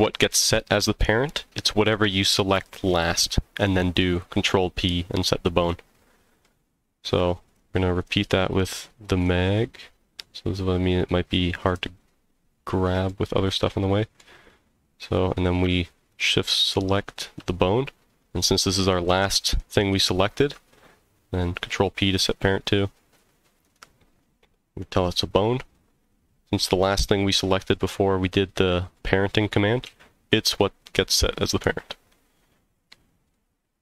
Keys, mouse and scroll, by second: 5.6-6.4 middle drag, 7.5 click, 8.0 click, 8.5 click, 9.0 click, 9.2 click, 11.6 click, 13.1-14.2 middle drag, 16.1 shift+click, 16.6 shift+click, 19.9 ctrl+p, 26.0 click, 29.8 g, 32.7 click, 32.7 right click, 33.3-33.8 middle drag.